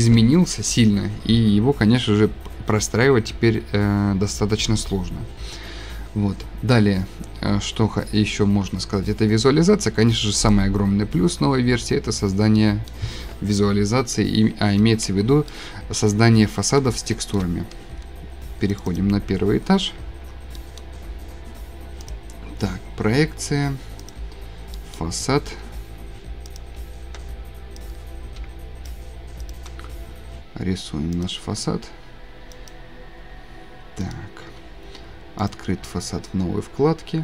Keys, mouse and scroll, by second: 8.1 scroll, 8.2 scroll down 3, 8.4-8.8 scroll, 9.3-10.5 scroll, 10.5 click, 11.4-11.8 scroll, 12.3 scroll, 14.8-15.2 scroll, 16.1-17.3 shift+scroll, 16.2 shift+middle click, 17.3 shift+middle click, 19.2 shift+scroll, 19.2 2, 20.3 7, 22.2-22.6 shift+scroll, 22.5 click, 24.1 click, 24.6 scroll, 26.6 scroll, 28.4-28.9 scroll, 28.9 shift+click, 29.5 shift+click, 31.2 click, 31.9 Escape, 32.7 click, 34.1 middle click, 35.5 click.